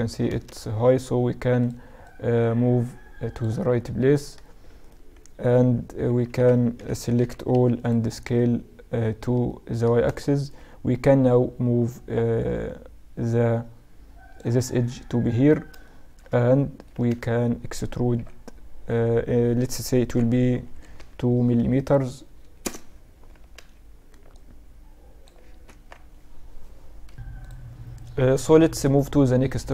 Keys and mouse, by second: 0.4 a, 0.6 a, 1.7-4.0 drag, 4.0 middle click, 4.9-7.0 right drag, 5.8 a, 5.9 a, 6.4 s, 8.3-9.8 drag, 10.1 a, 10.4-13.0 drag, 11.2-13.0 right drag, 14.9-18.2 middle drag, 17.0 a, 17.1 a, 18.2 e, 23.4 a, 23.6 a, 24.4-26.9 drag, 25.8 Tab.